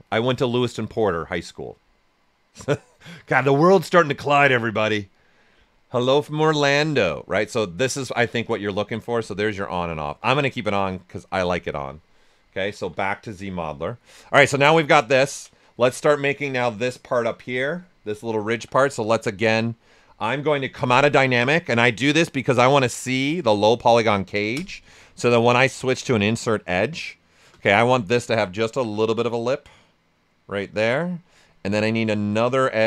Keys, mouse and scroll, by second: 5.7-9.0 drag, 5.7 typing, 12.8-13.8 typing, 14.5 right click, 14.9 alt+right click, 18.4 right click, 18.5 shift+f, 18.8 right click, 20.7 shift+d, 23.3 typing, 24.5 space, 28.4-32.8 drag.